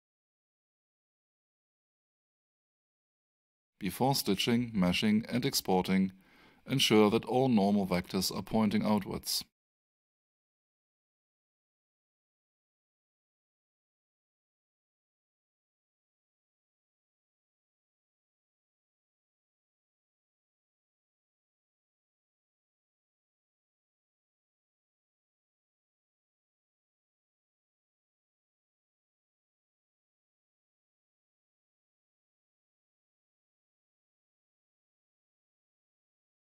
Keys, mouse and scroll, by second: 5.1 click, 6.7 alt+shift+right click, 7.5 alt+shift+middle click, 8.5 alt+shift+click, 8.9 alt+right click, 10.4 click, 10.6 double click, 11.0 space, 12.2 click, 12.7 space, 13.3 click, 13.7 space, 15.1 alt+shift+middle click, 16.8 alt+shift+click, 17.1 alt+shift+right click, 17.9 click, 18.8 space, 19.7 alt+shift+right click, 20.2 alt+shift+click, 22.1 alt+shift+right click, 23.9 alt+shift+click, 25.5 alt+shift+right click, 28.0 click, 28.6 space, 29.5 alt+shift+right click, 30.6 alt+shift+middle click, 31.7 alt+shift+click, 32.6 alt+shift+middle click, 34.3 click.